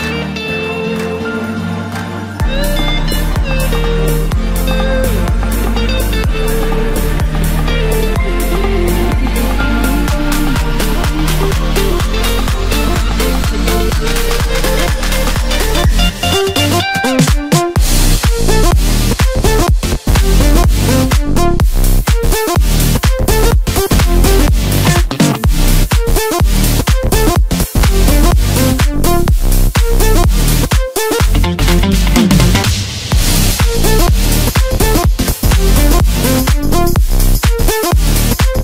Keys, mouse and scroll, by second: 1.0-1.9 scroll up 3, 1.9 e, 4.3-5.8 scroll down 9, 5.8 e, 8.3 click, 9.2-9.8 scroll up 1, 9.9-10.6 KP_8, 11.3-12.2 scroll up 1, 12.2 ctrl+r, 14.2-14.7 scroll down 1, 14.7 s, 18.9-19.4 scroll up 1, 19.4 3, 20.0 click, 20.2 click, 24.7-25.7 scroll up 1, 25.7-26.1 scroll down 3, 26.1-27.2 middle drag, 27.2-28.8 scroll up 2, 28.8-30.4 drag, 30.4-31.2 scroll up 1, 31.2 e, 33.0 e, 36.0 e, 37.2 Tab, 37.5-38.6 scroll down 4.